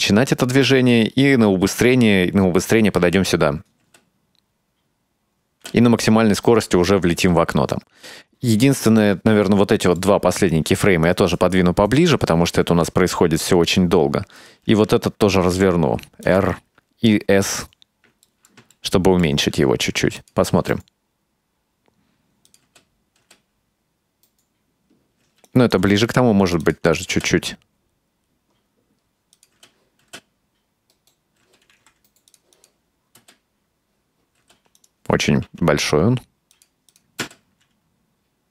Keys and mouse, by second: 3.9 space, 5.6 space, 5.7 space, 7.3 space, 8.1 right click, 9.2 ctrl+middle click, 10.6-11.2 right drag, 12.4 g, 14.5 right click, 15.6 r, 16.5 s, 18.5 shift+middle click, 18.8 ctrl+middle click, 20.3 click, 20.7 space, 22.6 click, 22.8 space, 23.3 space, 25.4 space, 25.5 right drag, 25.9 g, 27.0 click, 27.2 space, 29.5 click, 29.7 space, 30.2 space, 31.5 space, 31.8 g, 32.6 click, 33.3 space, 34.5 space, 34.9 right click, 35.5 s, 37.0 click, 37.3 space.